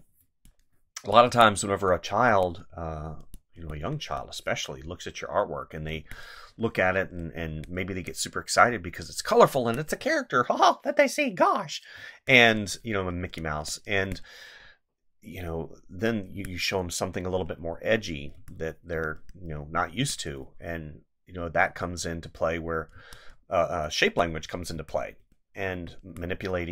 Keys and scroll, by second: 5.9 space, 7.5 space, 9.5 space, 11.9 space, 13.9 space, 16.3 space, 18.3 space, 20.0 space, 22.9 space, 24.7 space.